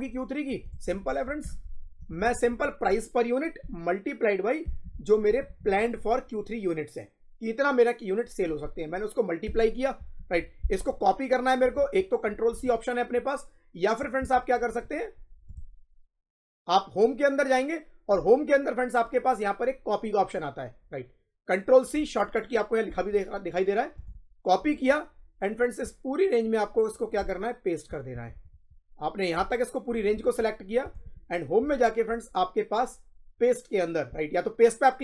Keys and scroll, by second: 1.3 =, 1.9 Left, 4.5 shift+8, 5.2 Left, 9.4 Return, 9.9 Up.